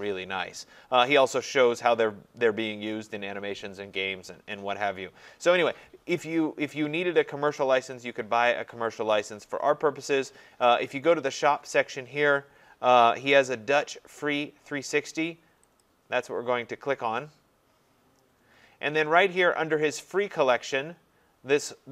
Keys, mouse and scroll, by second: 0.7-1.9 scroll, 4.2 scroll, 4.5 scroll down 5, 5.2-5.7 scroll up 14, 6.9 scroll up 3, 7.6-9.2 scroll down 14, 10.8 scroll up 3, 15.8 click, 19.2 scroll, 21.2 middle click.